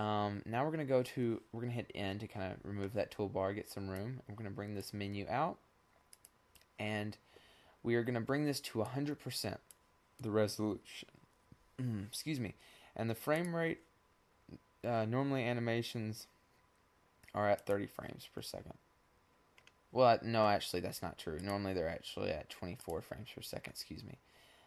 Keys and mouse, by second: 0.7 click, 2.3 click, 3.3-4.9 drag, 4.9-5.8 middle drag, 5.8-7.4 drag, 10.1-12.0 drag, 15.5-18.3 middle drag, 18.3-20.3 drag, 22.0-24.1 middle drag, 24.3 click.